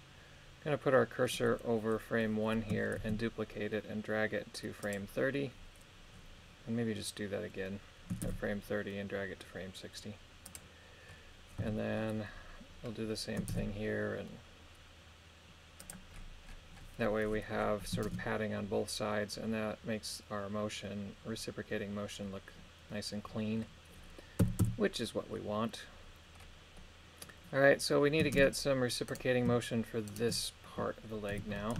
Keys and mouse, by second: 3.0 shift+d, 4.8-6.0 drag, 8.2 shift+d, 10.4 click, 11.6 a, 13.5 shift+d, 15.8 click, 18.1 shift+space, 24.4 a, 24.6 a, 26.8 middle click, 28.4 shift+space, 29.1 right click, 30.1 shift+right click, 31.3 KP_3.